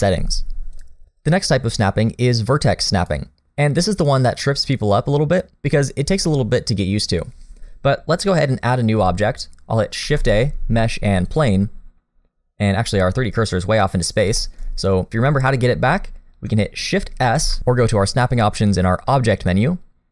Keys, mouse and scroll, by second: 0.8 click, 10.0 shift+a, 12.2-13.0 scroll down 4, 13.0 middle click, 13.6-14.2 scroll up 1, 14.4 shift+middle click, 14.6-15.1 scroll up 1, 17.4 shift+s.